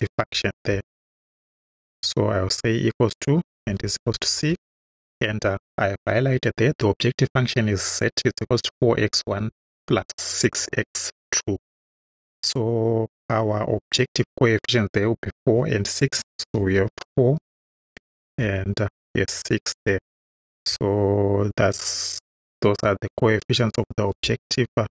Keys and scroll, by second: 1.6 shift+=, 3.4-4.9 typing, 16.6 4, 17.4 ,, 18.4 6, 19.8 Right, 24.1 Return.